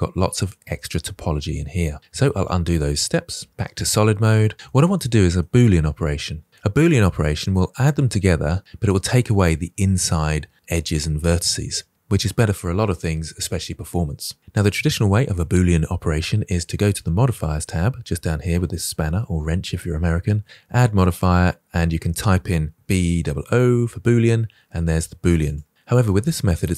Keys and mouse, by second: 0.6 middle click, 1.0 shift+middle drag, 2.4 ctrl+z, 3.0 ctrl+z, 4.1 middle click, 4.5 shift+middle drag, 4.9 middle click, 7.4 shift+middle drag, 20.7-25.4 drag, 23.0 o.